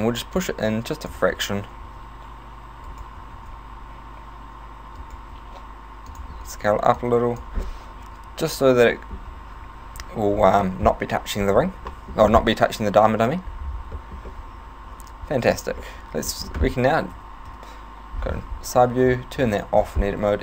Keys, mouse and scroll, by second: 0.4 click, 1.8 s, 3.0 right click, 3.4 alt+s, 5.2 right click, 5.4 s, 6.2 click, 7.0 click, 7.7 middle click, 9.3-9.7 scroll down 2, 11.9 middle click, 14.0 middle click, 14.3 middle click, 15.8 middle click, 16.0 middle click, 17.2 KP_1, 17.5 KP_3, 19.5 click.